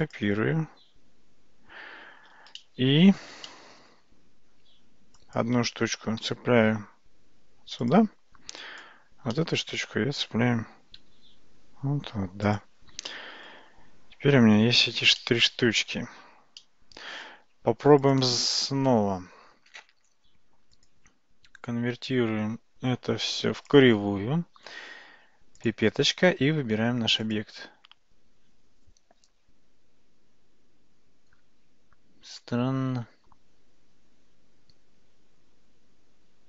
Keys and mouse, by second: 2.6-3.4 shift+middle drag, 3.5-3.9 middle drag, 4.8 Tab, 5.2 click, 6.2 g, 8.6 click, 9.4 middle click, 11.9 g, 13.1 middle click, 14.4 Tab, 15.2-16.0 middle drag, 16.6-17.1 middle drag, 18.1 click, 20.9-23.8 drag, 25.6 click.